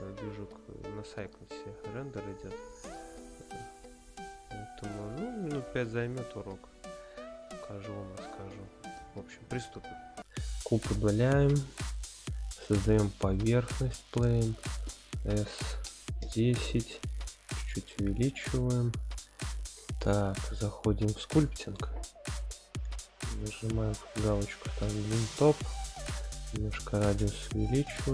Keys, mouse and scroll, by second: 0.4-1.0 scroll up 5, 1.9-2.3 shift+middle drag, 2.7-3.4 middle drag, 3.9-4.6 scroll down 3, 5.4-6.0 middle drag, 7.6-8.4 scroll up 1, 10.2 middle click, 10.3 x, 14.8 s, 15.6 KP_1, 15.8 KP_0, 16.2 KP_Enter, 17.0-17.3 scroll down 2, 17.4-17.8 scroll up 1, 17.9-19.2 middle drag, 20.4-21.5 drag, 23.2-24.3 drag, 25.9-27.1 drag, 27.6 scroll down 1.